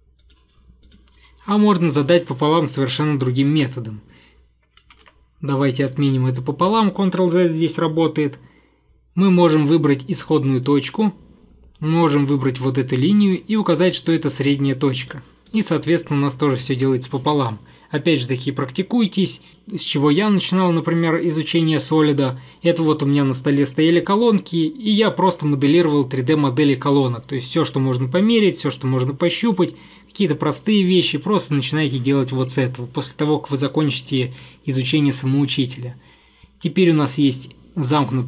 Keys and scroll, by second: 3.6 ctrl+я, 5.1 ctrl+я.